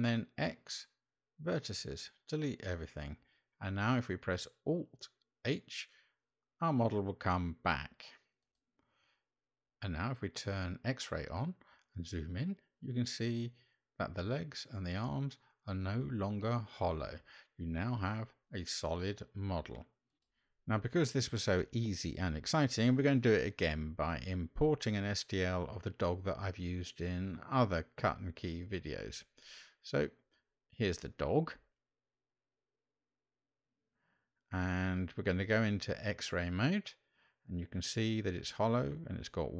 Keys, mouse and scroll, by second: 4.1 alt+h, 7.7 Tab, 10.0 click, 11.4-12.0 middle drag, 13.4-15.4 middle drag, 16.2-16.9 middle drag, 20.3-24.1 drag, 31.8-32.9 middle drag, 34.3 click, 36.7-37.3 shift+middle drag, 39.4-39.5 middle drag.